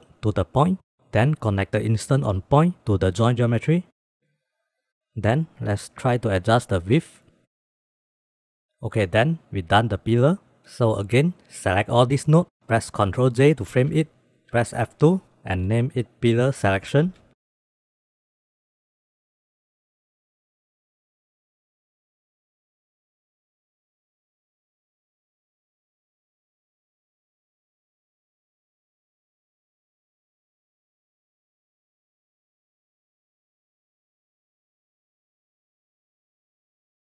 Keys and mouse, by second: 1.7 click, 2.2-4.2 drag, 4.3 drag, 6.9 click, 7.3 click, 7.6 click, 7.8 click, 8.0 click, 8.3 click, 9.8 click, 10.0 click, 10.2 click, 11.2 middle click, 11.6-12.3 drag, 13.1 ctrl+j, 14.9 F2, 15.9 l, 18.8 click, 19.5-19.9 drag, 20.2 g, 21.9 click, 22.4 drag, 22.8 g, 23.6 drag, 24.1 g, 25.0 drag, 25.3 click, 25.7 click, 25.9 g, 26.8 click, 27.1 g, 28.6 drag, 29.5 click, 30.6 drag, 31.0 click, 32.4 g, 33.4 click, 34.5-34.9 drag, 35.4-35.9 drag, 36.2 g.